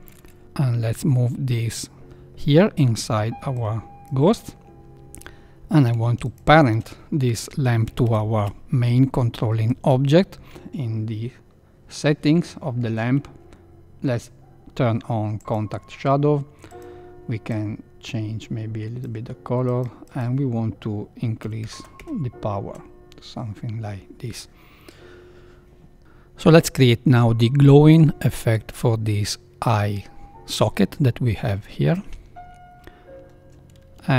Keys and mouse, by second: 1.0-2.0 drag, 2.0 KP_3, 3.5 click, 4.5 middle click, 4.9 KP_1, 6.2 shift+click, 8.0 ctrl+p, 15.3 click, 16.7 click, 20.1-23.0 drag, 21.7 KP_0.